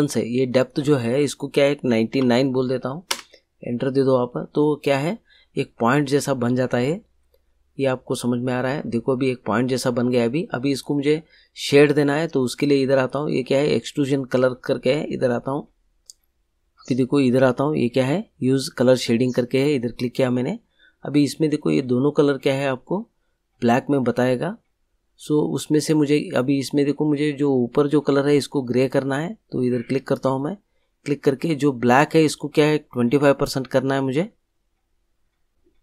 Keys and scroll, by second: 1.8 9, 3.1 Return.